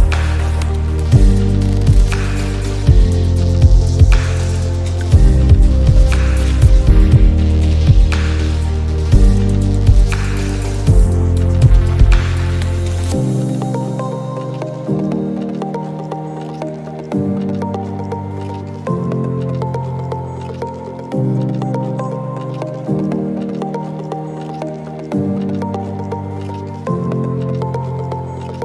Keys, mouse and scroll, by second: 0.4 click, 4.2 space, 4.3 click, 4.6 space, 6.0 click, 6.4 space, 6.5 click, 6.7 space, 7.3 click, 11.3 click, 14.4 click, 15.9 click, 19.7 click, 21.5 alt+scroll up 1, 22.8 click, 23.1 space, 24.7 click.